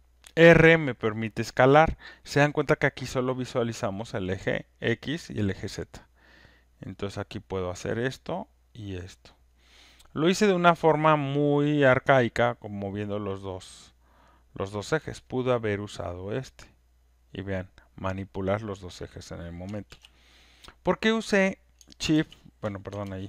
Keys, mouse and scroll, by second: 7.5 click, 9.5 click, 18.6 click, 19.9 ctrl+x, 22.1 z, 23.0 z.